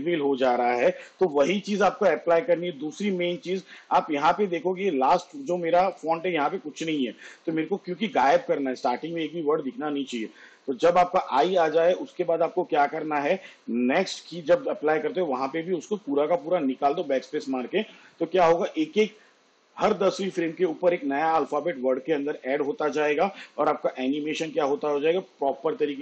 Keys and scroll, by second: 1.2 space.